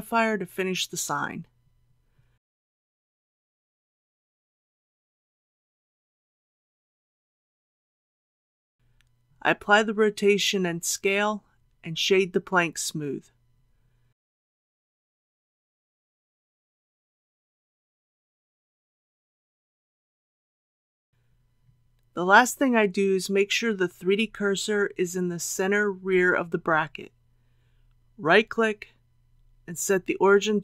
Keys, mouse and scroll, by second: 2.5 KP_0, 3.9 click, 4.8 KP_1, 7.8 ctrl+a, 12.2 ctrl+a, 13.9 click, 16.1 right click, 16.8-19.2 drag, 22.5 middle click, 24.0 scroll down 1, 27.5 click, 28.0 right click, 29.6 click.